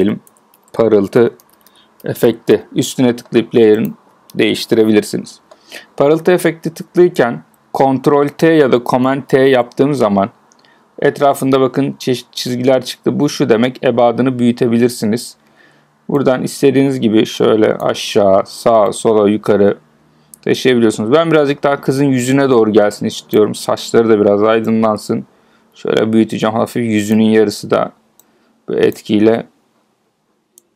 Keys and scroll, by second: 9.2 super+t.